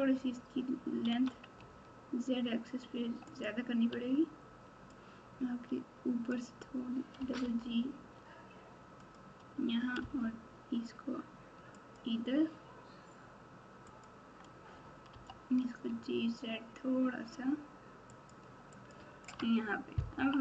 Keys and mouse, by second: 1.0 s, 3.9 Tab, 5.1-6.3 drag, 7.1 g, 9.9 g, 13.9 click, 15.1 g, 18.8 click, 19.3 Tab, 20.1-20.4 typing.